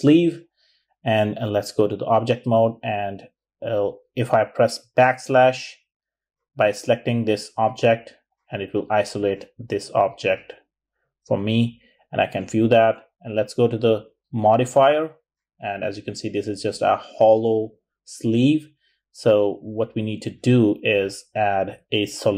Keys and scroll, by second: 3.0-3.8 typing, 7.2-8.2 typing, 13.8-15.0 typing, 16.9-18.8 typing.